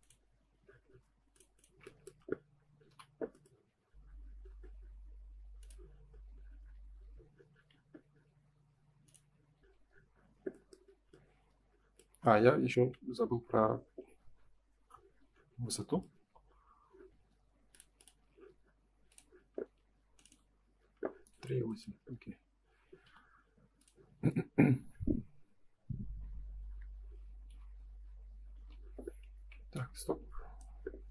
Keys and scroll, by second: 2.8 m, 6.7 F4, 9.1 F4, 12.0 space, 12.7 ctrl+s, 26.6 Return, 28.6 Escape, 29.7 space.